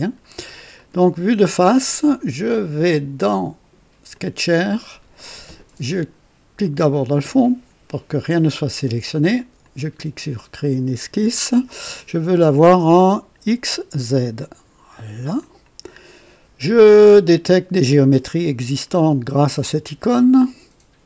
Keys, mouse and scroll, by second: 0.2-0.6 scroll up 2, 0.8 right click, 2.9 click, 4.1 click, 6.8 click, 9.6 click, 14.3 click, 15.4 click, 19.6 click.